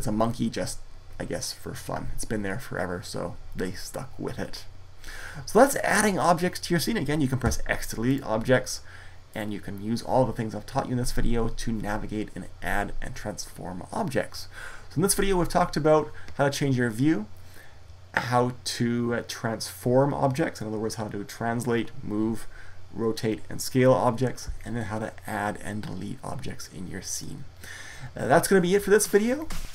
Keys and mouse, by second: 7.2 x, 9.0-11.0 drag.